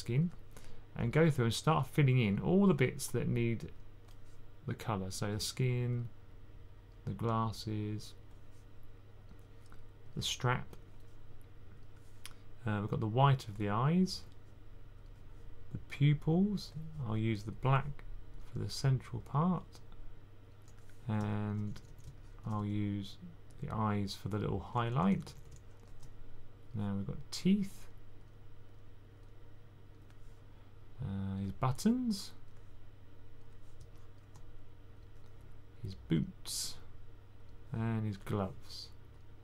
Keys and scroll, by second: 21.4-22.4 typing, 24.5-25.3 typing.